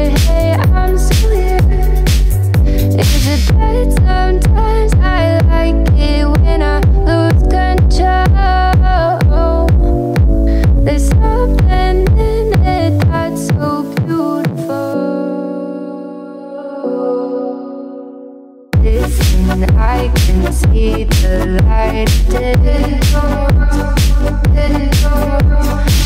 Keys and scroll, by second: 12.5 Left, 18.1 Right, 21.8 Right, 22.6 Left, 23.8 Right, 25.7 Left.